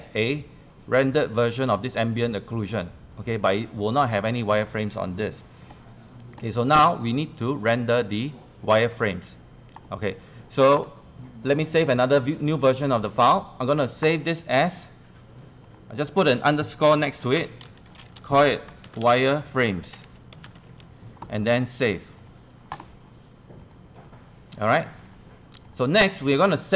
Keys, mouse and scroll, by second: 15.4 click, 18.6-22.7 typing, 22.2 click.